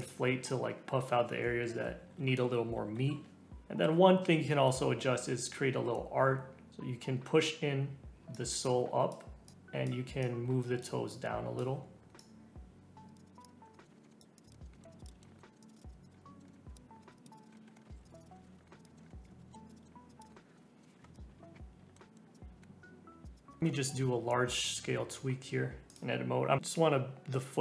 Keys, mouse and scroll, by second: 0.3 scroll down 3, 0.7 scroll up 3, 2.0-3.1 typing, 3.5 scroll down 2, 6.7-7.7 drag, 8.3-13.5 drag, 13.5 middle click, 13.7 click, 13.8 middle click, 14.0 [, 14.0 middle click, 14.3 click, 14.5 middle click, 14.7 scroll down 3, 14.7 middle click, 14.9 click, 15.1 middle click, 15.2 scroll down 1, 15.2 middle click, 15.4 scroll up 8, 15.5 middle click, 15.6 click, 16.1-16.6 scroll down 3, 16.1 middle click, 16.4 middle click, 16.6 scroll up 6, 16.7 click, 16.8 scroll down 2, 17.0 click, 17.5 middle click, 17.5 scroll up 1, 17.6 middle click, 17.7 scroll down 1, 17.7 middle click, 17.7 scroll up 4, 17.9 [, 18.0 click, 18.2 scroll down 2, 18.3 middle click, 18.4 middle click, 18.5 ctrl+z, 18.5 ctrl+z, 18.6 scroll up 4, 18.7 middle click, 18.8 click, 18.8 scroll down 2, 18.9 middle click, 19.0 scroll up 1, 19.0 Tab, 19.0 middle click, 19.1 Tab, 19.1 Tab, 19.2 Tab, 19.4 alt+z, 19.4 Tab, 19.5 middle click, 19.5 Tab, 19.6 click, 19.8 scroll up 1, 19.8 middle click, 19.9 scroll down 2, 19.9 Tab, 20.0 Tab, 20.1 click, 20.2 click, 20.3 middle click, 20.5 middle click, 20.6 middle click, 20.8 scroll up 4, 21.1 click, 21.4 middle click, 22.0 middle click, 22.3 click, 22.5 middle click, 22.6 scroll up 2, 22.8 Tab, 22.9 Tab, 23.2 click, 23.3 click, 23.6 Tab, 23.7 shift+middle click, 24.1-24.7 scroll up 1, 24.7 alt+z, 25.9 click, 26.6 click, 26.6 s.